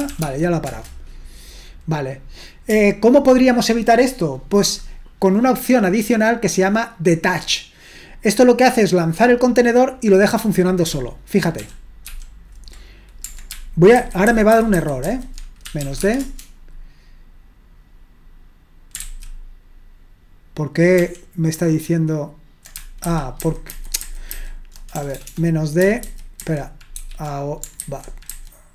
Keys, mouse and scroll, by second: 0.0-0.7 typing, 11.6 ctrl+p, 12.1 ctrl+p, 14.0 alt+b, 14.3 alt+b, 14.5 alt+b, 14.7 alt+b, 15.4-16.3 typing, 19.0 ctrl+c, 21.0 ctrl+p, 23.1 alt+b, 23.4 alt+b, 23.7 alt+b, 24.0 alt+b, 24.9 BackSpace, 25.2 BackSpace, 25.3 BackSpace, 26.0 alt+b, 26.4 alt+b, 27.0 alt+b.